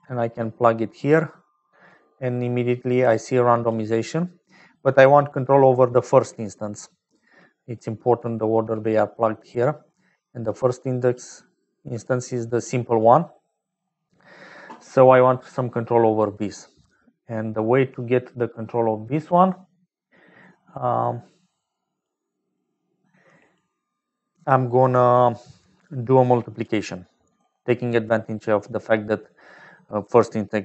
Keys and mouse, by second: 3.1 click, 6.7 middle click, 7.8 click, 9.1 middle click, 10.8 click, 11.6-12.6 drag, 13.1 middle click, 16.6 middle click, 17.4 middle click, 25.5 click, 26.2 click, 27.0 middle click.